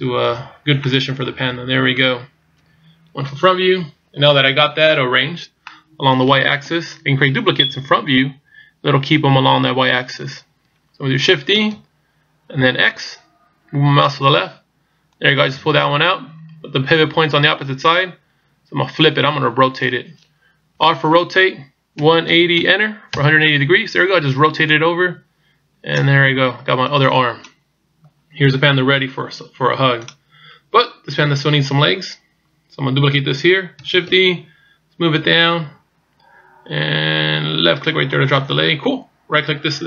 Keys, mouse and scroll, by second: 0.9 middle click, 2.6 KP_1, 5.7 middle click, 6.7 KP_3, 8.5 KP_1, 11.6 shift+d, 20.7 r, 24.7 click, 34.1 shift+d.